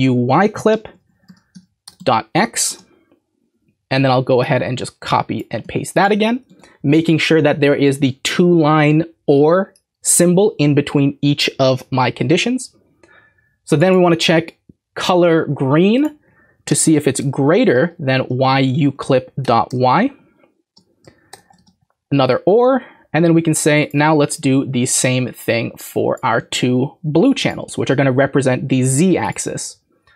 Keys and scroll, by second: 0.7 Right, 0.8 Right, 1.0 Right, 1.1 Right, 1.2 Right, 1.5 Right, 1.8 BackSpace, 2.0 x, 5.6 ctrl+c, 6.5 ctrl+v, 16.7 BackSpace, 17.2 >, 17.6 Right, 17.8 Right, 17.9 Right, 18.1 Right, 18.3 Right, 18.4 Right, 18.6 Right, 18.7 Right, 18.9 Right, 19.4 BackSpace, 19.7 y, 21.3 |, 21.4 |, 26.4 ctrl+c, 27.7 ctrl+v.